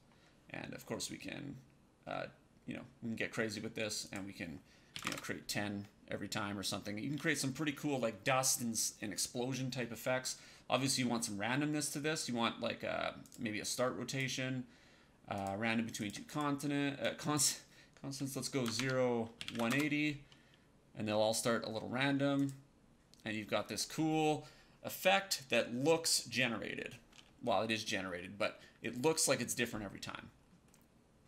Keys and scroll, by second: 4.8 KP_1, 4.9 Return, 6.5 KP_0, 18.5 KP_0, 18.7 Tab, 19.3 KP_1, 19.5 KP_0, 19.6 Return.